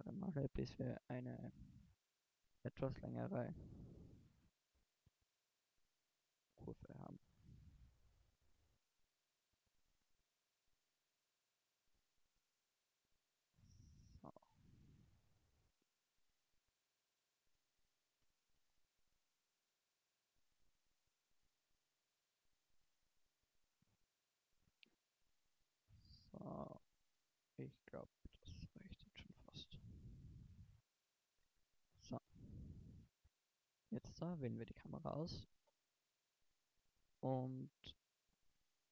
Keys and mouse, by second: 0.9 middle click, 1.6 middle click, 3.6-5.1 right drag, 4.8 f, 6.6 x, 8.8 a, 10.5 shift+d, 12.9 click, 14.3 middle click, 14.9 click, 16.0 g, 17.7-19.5 drag, 20.9 f, 22.3 x, 23.3 middle click, 25.6 a, 28.0 middle click, 28.3 a, 30.3 middle click, 30.7 Tab, 31.5 middle click.